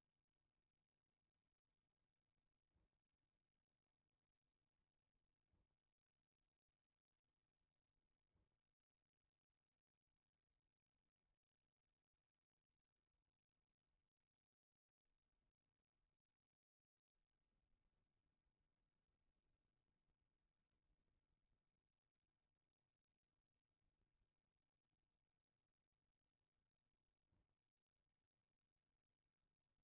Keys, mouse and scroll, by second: 1.9 click, 3.0 click, 6.7-8.8 drag, 10.8 middle click, 13.2-17.4 drag, 18.6-20.2 drag, 21.1-23.9 drag, 26.6-27.6 middle drag, 27.6 scroll down 1.